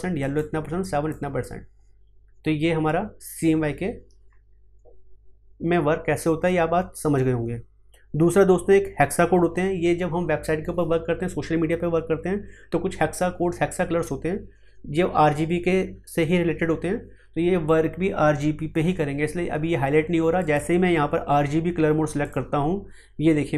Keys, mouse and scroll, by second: 20.3 click.